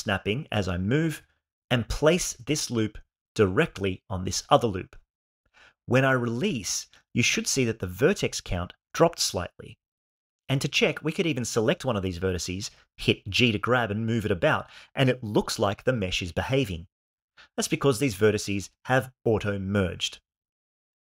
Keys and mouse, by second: 1.0 g, 10.9 g, 13.1 click, 13.3 g, 14.7 right click, 15.3 click, 15.5 g.